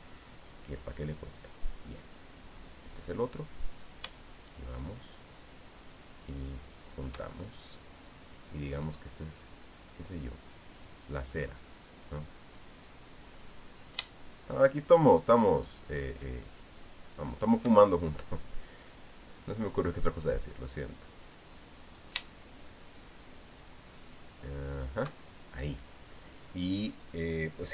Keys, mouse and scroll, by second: 4.6 shift+click, 7.6 shift+click, 14.6 shift+click, 18.1 shift+click, 22.7 shift+click, 25.6 shift+click.